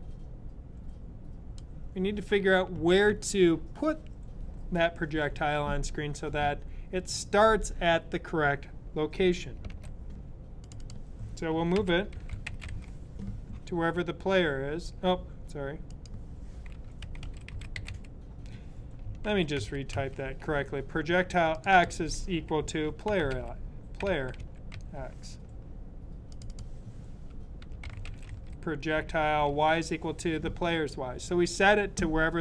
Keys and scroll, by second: 9.6 typing, 11.4-13.1 typing, 16.6-18.3 typing, 19.0 super+z, 19.8 z, 22.5-24.9 typing, 27.2-29.9 typing.